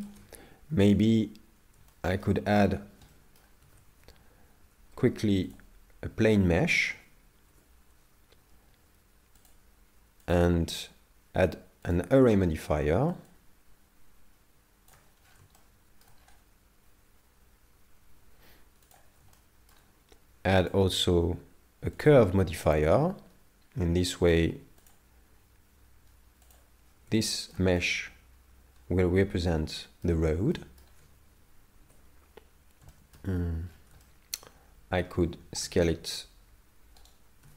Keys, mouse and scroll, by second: 0.7 KP_7, 1.9 shift+middle click, 2.5 scroll up 1, 3.1 shift+middle click, 3.1 scroll up 3, 3.6 shift+a, 7.0 Tab, 9.4 click, 13.3 shift+click, 15.2-15.7 scroll down 8, 15.6 shift+middle click, 16.2 scroll up 3, 18.4 scroll up 1, 19.0 click, 19.3 shift+middle click, 20.6 click, 23.7-24.1 scroll down 7, 24.9 click, 27.3 shift+middle click, 27.8 middle click, 31.8 KP_7, 32.9 shift+middle click, 33.3 Tab, 33.7-34.3 scroll up 6, 34.1 shift+middle click, 35.3-35.6 scroll down 2, 35.6 s.